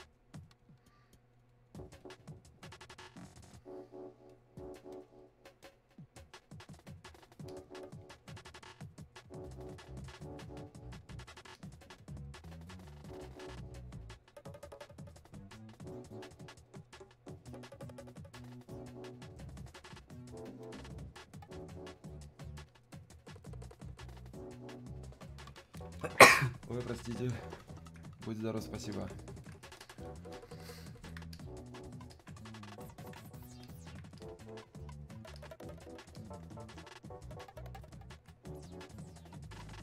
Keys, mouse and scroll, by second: 11.6-22.2 drag, 28.9-39.8 alt+drag.